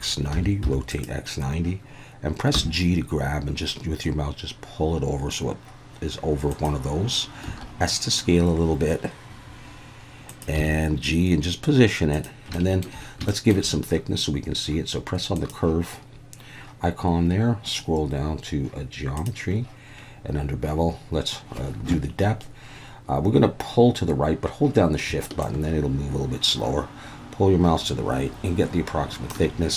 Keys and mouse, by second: 0.3 9, 0.6 0, 0.9 click, 2.8 g, 6.5 click, 7.5 s, 10.3 click, 10.6 g, 12.1 click, 12.7 shift+middle click, 13.4 shift+middle click, 15.3 click, 19.2 click, 25.4-29.4 shift+drag.